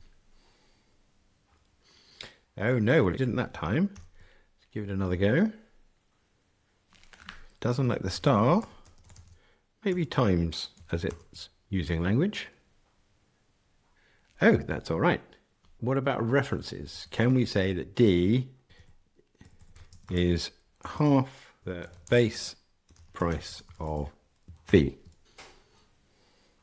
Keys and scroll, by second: 0.0 ctrl+r, 3.9 ctrl+r, 11.0 ctrl+r, 25.2 ctrl+r.